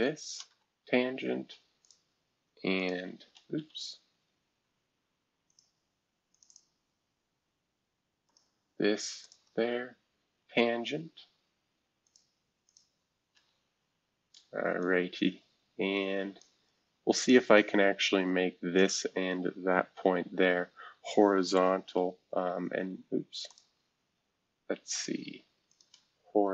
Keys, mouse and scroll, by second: 0.2 ctrl+shift+click, 1.6-4.0 typing, 1.8 ctrl+click, 2.8 click, 5.5 click, 6.3 click, 6.5 click, 8.3 click, 9.2 shift+click, 12.0 click, 12.7 click, 13.3 Escape, 14.8-17.1 drag, 17.2 click, 18.7-20.4 shift+drag, 20.4 scroll down 1, 20.4-21.2 scroll up 2, 21.2-22.1 scroll up 1, 22.1 scroll up 1, 22.2 shift+h, 23.5-26.5 drag.